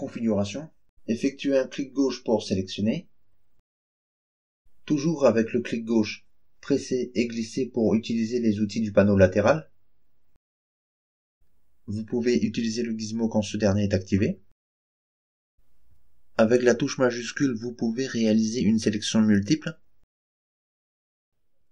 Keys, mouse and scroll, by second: 1.7 click, 3.2 click, 6.8-11.3 drag, 11.9 click, 13.6-16.2 drag, 17.4 shift+click, 18.5 shift+click, 19.4 shift+click, 20.2 shift+click, 21.1 shift+click.